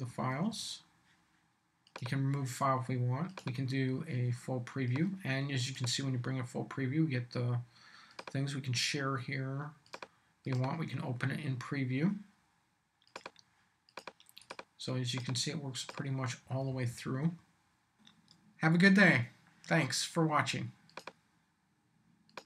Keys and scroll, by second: 0.1 Up, 16.4 Down.